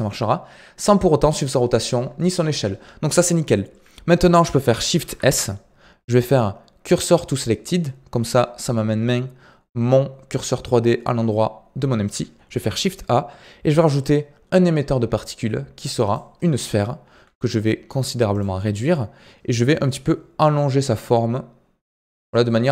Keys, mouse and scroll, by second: 4.9 shift+s, 11.4-12.5 scroll up 3, 12.5 shift+a, 16.4-21.5 middle drag, 21.5 s, 22.4-22.7 middle drag.